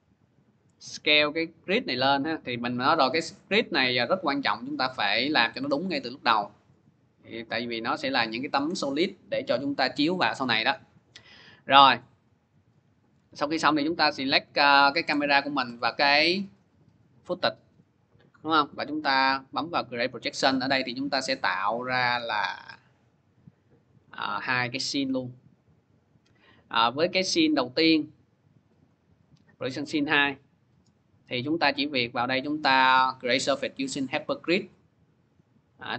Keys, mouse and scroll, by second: 0.7 click, 1.9 click, 3.6 s, 4.5 click, 7.9 click, 11.4 click, 12.9 click, 13.0 click, 13.8 click, 14.3 ctrl+click, 14.4 ctrl+click, 14.9 click, 15.4 ctrl+click, 17.1 click, 19.3 click, 20.9 click, 21.9 click, 24.0 click, 26.2 click, 28.5 click, 28.7 click, 30.9 click, 31.3 click, 32.1 click, 34.2 click.